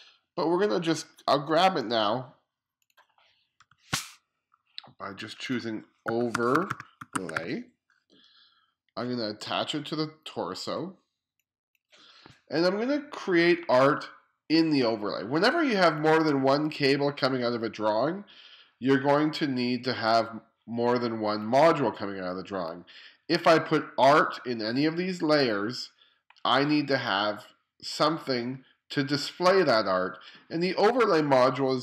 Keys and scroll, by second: 3.7 o, 5.9-7.9 typing.